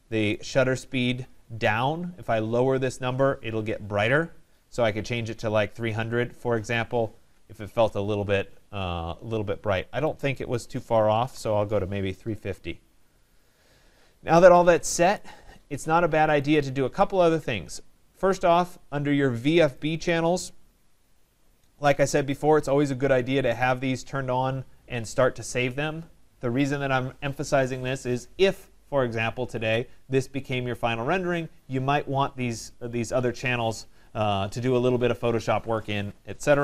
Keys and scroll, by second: 7.2 Tab.